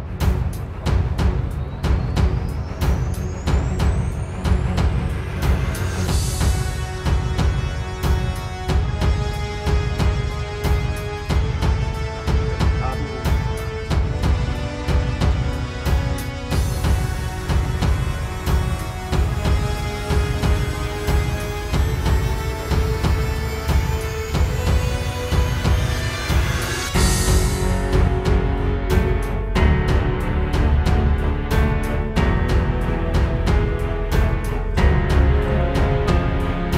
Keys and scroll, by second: 1.3 space, 2.1 super+z, 4.9 space, 6.6 space, 10.9 space, 11.9 space, 12.6 space, 13.1 space, 14.2 space, 18.3 space, 19.0 super+space, 19.3 super+space, 19.7 super+space, 22.1 space, 22.5 space, 26.2 super+z, 26.3 super+', 28.8 super+'.